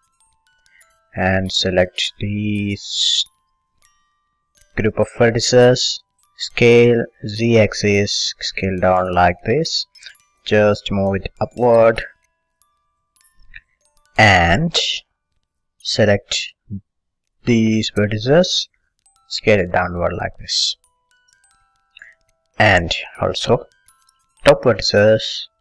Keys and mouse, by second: 0.3 a, 1.2 b, 3.5 click, 6.4 s, 9.9-12.8 drag, 14.3 middle click, 15.1 a, 16.6 b, 19.2 s, 22.2 click, 23.0 middle click, 23.5 a, 23.9-25.6 drag, 24.0 b.